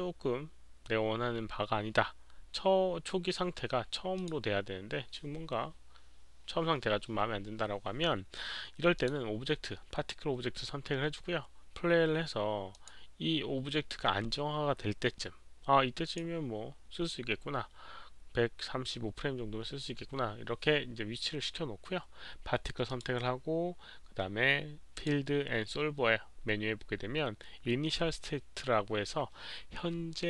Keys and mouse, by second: 4.1 click, 8.9 click, 12.7 click, 14.9 click, 16.0 click, 22.8 click, 24.9 click, 26.9 click, 26.9 click.